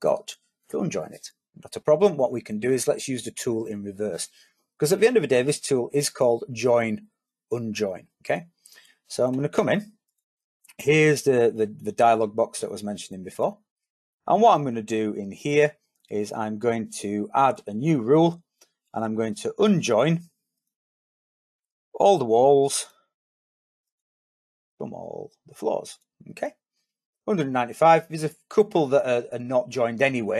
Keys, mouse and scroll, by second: 11.0 click.